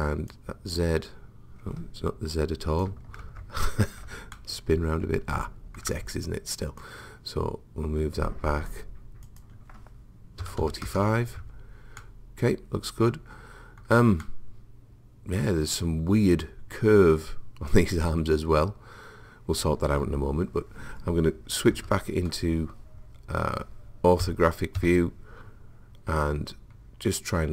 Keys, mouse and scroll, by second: 0.3 click, 3.3 ctrl+z, 4.4-6.2 middle drag, 6.8 click, 8.8 middle click, 9.3 click, 12.0-13.8 middle drag, 14.2-16.2 middle drag, 21.8 KP_5, 24.2 KP_1, 24.8 KP_9, 26.4-27.4 middle drag.